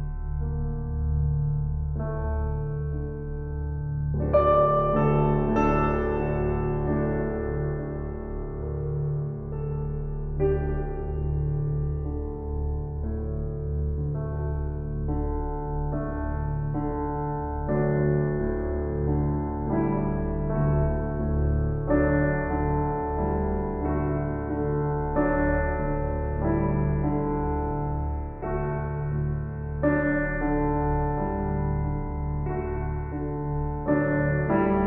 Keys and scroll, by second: 22.1 shift+s, 26.3 shift+s, 32.7 shift+s, 34.7 shift+s.